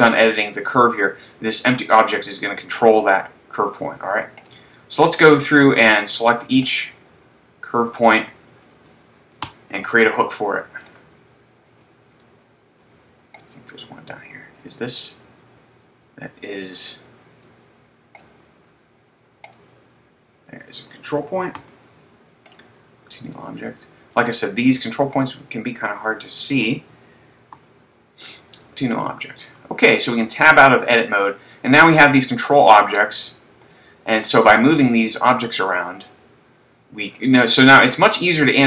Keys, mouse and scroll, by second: 4.8 right click, 5.8 scroll up 1, 7.1 right click, 9.8 ctrl+h, 12.2 shift+middle click, 13.4 right click, 14.9 click, 18.3 right click, 19.5 right click, 21.9 ctrl+h, 23.8 shift+middle click, 25.4 right click, 27.9 ctrl+h, 30.1 Tab, 30.9 shift+middle click, 31.8 scroll down 1, 32.6-32.9 scroll down 1, 34.2 right click, 34.9 click.